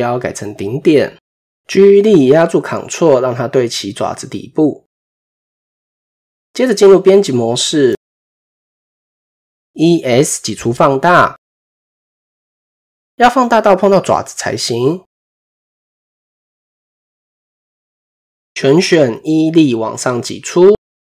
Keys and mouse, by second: 1.9 g, 5.1 shift+click, 6.3 shift+click, 7.0 Tab, 8.3 middle click, 12.0 middle click, 13.4 s, 16.2 KP_1, 17.2 a.